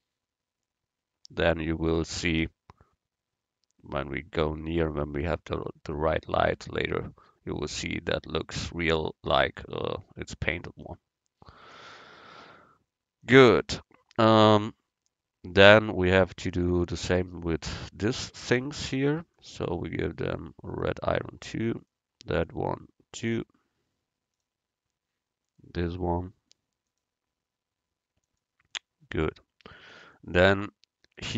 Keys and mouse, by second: 11.8-13.6 drag, 14.1-16.2 middle drag, 19.4-21.3 drag, 22.0-25.2 right drag, 23.3-25.2 drag, 25.6-28.8 right drag, 27.0-28.8 drag, 30.6 middle click.